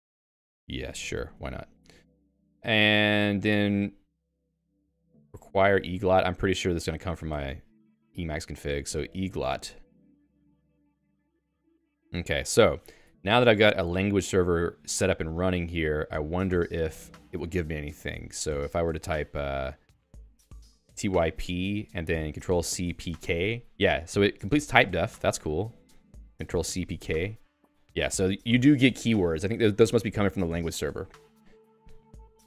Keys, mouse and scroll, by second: 1.1 !, 3.5 alt+x, 4.7 ctrl+g, 4.9-7.3 typing, 7.6 Return, 8.7 alt+x, 9.1-10.9 typing, 14.0 j, 27.1 BackSpace.